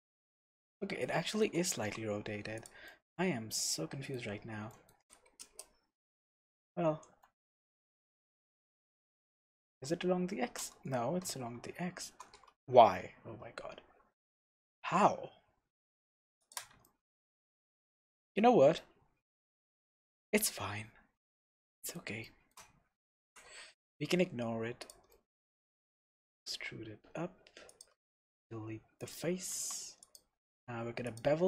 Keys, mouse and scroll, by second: 0.0 scroll up 1, 0.3-2.7 middle drag, 1.8 g, 2.7 click, 2.9-3.7 middle drag, 4.3-4.7 scroll down 1, 4.7 middle click, 5.2 scroll down 1, 5.4 KP_0, 6.9 r, 16.5 shift+click, 16.8-24.9 shift+middle drag, 17.6-18.0 scroll down 2, 18.5-19.3 scroll up 2, 20.0-20.3 scroll up 2, 20.7-21.5 scroll up 2, 23.2 s, 24.9 click, 25.1-27.8 middle drag, 25.4 Tab, 26.0 e, 27.8 click, 27.9 x, 29.5 Tab, 30.0-31.4 drag.